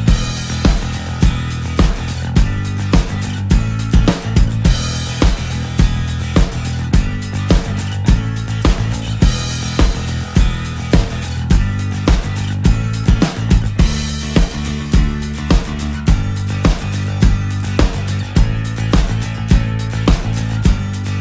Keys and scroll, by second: 0.9 ctrl+z, 9.7 alt+space.